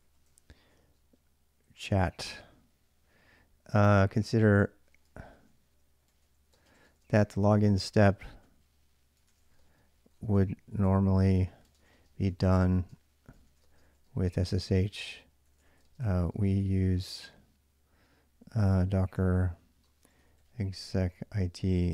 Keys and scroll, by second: 0.0-0.6 typing, 2.2 Return, 3.3-17.0 typing, 18.2-21.9 typing.